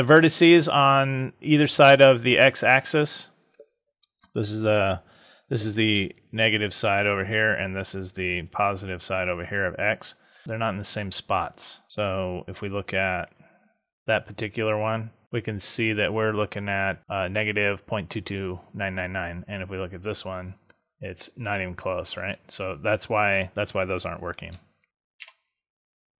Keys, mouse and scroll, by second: 5.9 d, 6.0 click, 7.1-10.2 d, 8.1 click, 8.8 click, 13.1 click, 13.9 click, 15.2-15.8 scroll up 4, 19.8 click, 24.4 d, 24.7 right click, 25.1 Tab.